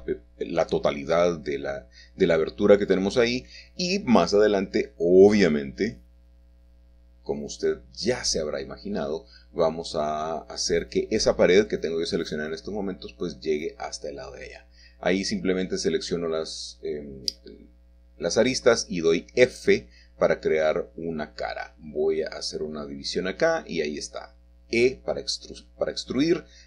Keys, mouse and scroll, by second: 0.2-0.7 scroll down 1, 0.7-1.9 middle drag, 2.8-4.5 shift+middle drag, 4.5 click, 5.0 y, 5.9 middle click, 8.1-10.6 shift+middle drag, 10.1-11.5 scroll up 1, 12.0 2, 13.2 click, 14.0 shift+click, 14.6 f, 15.1 click, 15.2 scroll down 1, 15.4 scroll up 1, 15.8 shift+click, 15.9 f, 16.0 click, 16.3 shift+click, 16.4 shift+click, 16.6 shift+click, 16.8 click, 17.1 ctrl+z, 17.1 ctrl+shift+click, 17.5-18.8 middle drag, 17.5 scroll down 1, 17.5 f, 17.7 Tab, 17.9 Tab, 18.7 scroll up 1, 18.9 click, 19.6 click, 19.7 middle click, 20.0 scroll down 1, 20.4 middle click, 21.3 ctrl+click, 21.9 shift+middle click, 22.3 scroll up 2, 22.4 shift+middle click, 22.9 3, 23.0 click, 23.2 e, 23.9 shift+middle click, 24.3-25.3 scroll down 4, 24.5 middle click, 25.5 middle click, 25.9 Tab.